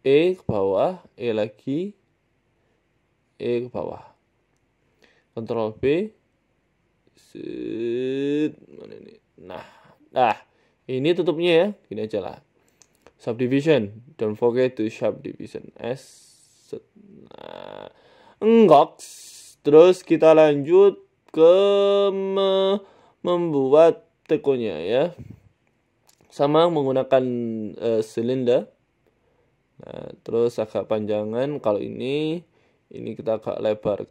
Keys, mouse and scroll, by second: 1.1 e, 2.1 s, 2.9 e, 4.3 ctrl+r, 5.6 s, 6.5 ctrl+b, 8.0 scroll up 2, 8.2 scroll down 1, 8.3 shift+middle click, 8.9 ctrl+b, 10.0 Tab, 10.2 scroll down 3, 10.5 middle click, 11.5 click, 13.7 middle click, 14.4 KP_1, 15.0 g, 15.9 s, 17.4 g, 18.2-18.9 scroll down 9, 18.5 shift+middle click, 19.1 click, 19.6-20.4 scroll up 4, 20.4 scroll up 2, 21.3 right click, 21.7 shift+middle click, 23.0-23.3 scroll down 3, 23.2 click, 24.1 s, 24.8 scroll up 5, 25.0 shift+middle click, 25.9 g, 26.6 shift+a, 29.2 s, 30.2 shift+middle click, 30.8 Tab, 31.6 shift+middle click, 32.6 click, 33.1 s, 33.8 Tab, 34.0 s.